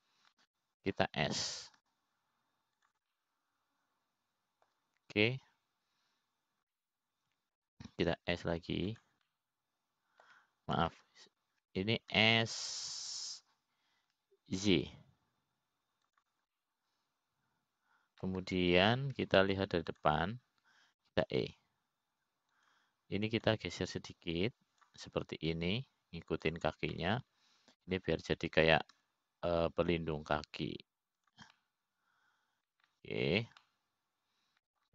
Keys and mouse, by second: 2.4 shift+click, 3.0 middle click, 4.5 s, 5.8-7.4 middle drag, 9.3 middle click, 10.8 s, 11.8-12.9 middle drag, 13.6 ctrl+z, 16.3 s, 19.1-20.9 middle drag, 23.8 e, 26.1-27.5 drag, 28.1-29.1 drag, 29.6-30.6 middle drag, 31.5 s, 34.2-34.9 middle drag.